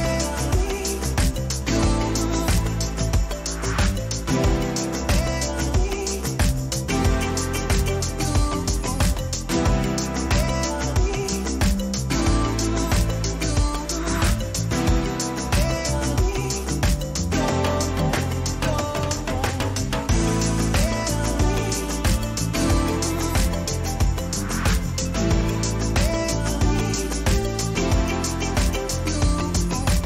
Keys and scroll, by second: 6.1 ctrl+-, 10.6 ctrl+t, 15.8 Return, 16.5 ctrl+t, 18.9 Return, 25.9 ctrl+alt+z.